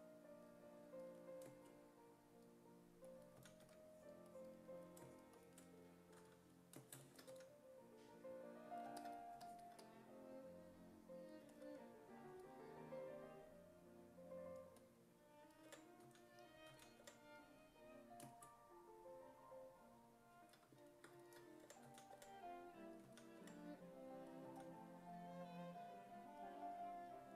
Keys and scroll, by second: 3.4 s, 3.7 1, 6.2 s, 7.3 w, 15.7 5, 16.1 s, 16.7 s, 17.0 5, 21.4-23.4 typing, 24.5 s.